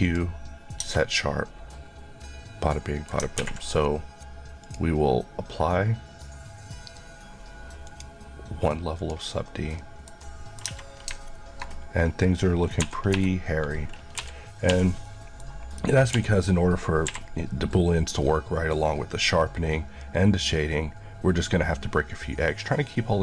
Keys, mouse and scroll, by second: 0.0 click, 0.8 Tab, 1.0 middle click, 4.6 click, 8.7 click, 9.8 middle click, 10.6 Tab, 12.9 typing, 14.0-14.7 typing, 15.0 middle click, 15.5-16.2 scroll, 16.2-17.1 typing.